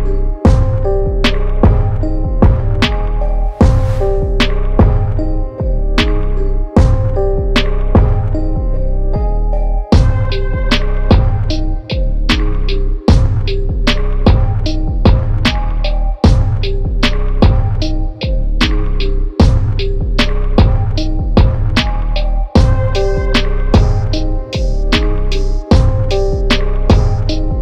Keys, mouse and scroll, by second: 4.1 click, 6.6 click, 8.3 click.